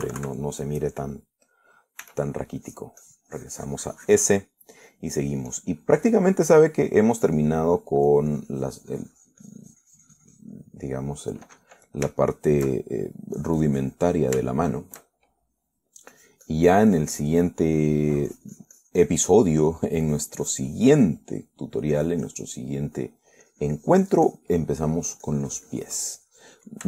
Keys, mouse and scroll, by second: 1.1 KP_Subtract, 1.8-3.1 middle drag, 3.3 s, 3.9 click, 5.8 middle click, 6.5-7.7 drag, 7.8 middle click, 8.5 click, 9.1 middle click, 11.6 click, 11.9 middle click, 13.4 shift+middle click, 14.6 shift+click, 15.3 shift+middle click, 15.8 shift+middle click, 16.7 shift+middle click, 17.4-18.5 drag, 18.8 middle click, 19.9-21.2 drag, 20.8 middle click, 21.3-22.9 drag, 23.2 click, 23.9 middle click, 24.7-26.4 drag, 26.5-26.8 drag.